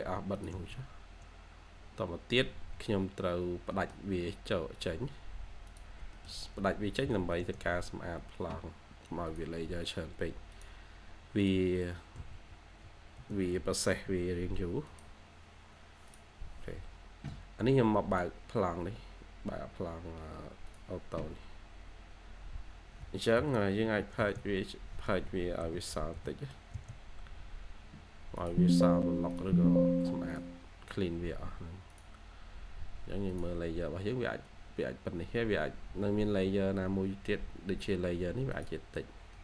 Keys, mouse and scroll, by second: 0.7 scroll down 1, 0.9-1.4 scroll up 1, 1.4-1.7 scroll down 1, 1.9 scroll up 1, 2.1-2.4 scroll down 1, 2.4 3, 2.6-3.0 scroll up 1, 3.0 3, 3.2 scroll, 3.2-3.5 scroll down 1, 3.5 3, 3.6 middle click, 6.5 typing, 12.8-14.3 typing, 23.3-23.7 typing, 25.0 Escape, 25.5-26.0 typing, 36.6 Escape, 36.8 Escape, 37.0-37.3 scroll up 1, 37.3 scroll down 1, 37.5-37.8 scroll up 1, 38.9-39.2 scroll down 1, 39.2 middle click.